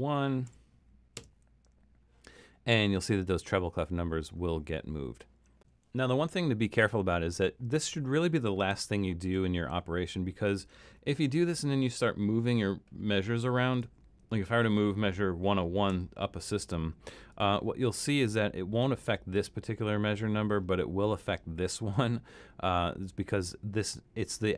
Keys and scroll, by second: 0.5 1, 8.8 super+-, 15.9 Up.